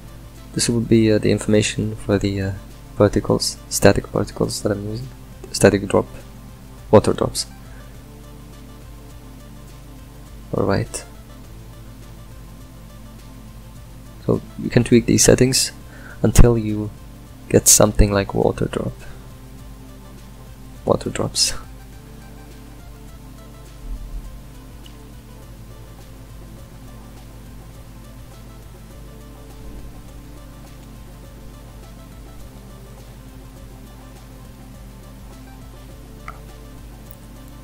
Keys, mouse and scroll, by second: 5.7-11.0 drag, 11.0-12.6 ctrl+middle drag, 12.6-14.4 drag, 15.1-19.6 shift+drag, 20.4-28.8 shift+drag, 28.8 middle click, 29.5 scroll up 1, 30.0-31.2 ctrl+middle drag, 31.2-32.6 drag, 32.6-37.6 ctrl+middle drag.